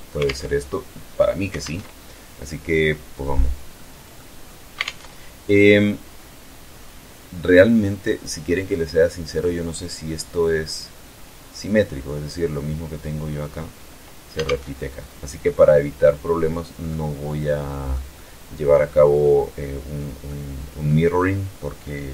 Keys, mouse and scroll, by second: 1.1 alt+Tab, 3.2-3.8 middle drag, 3.9 scroll down 2, 4.3 alt+Tab, 5.2-5.8 scroll down 2, 6.9-7.3 scroll up 2, 8.0-8.4 scroll up 2, 8.6-11.4 scroll down 2, 11.4 scroll down 1, 14.0 alt+Tab, 14.4-14.9 alt+scroll up 2, 15.1-16.5 middle drag, 16.6-17.0 scroll down 1, 17.3 middle click, 19.7-20.5 middle drag.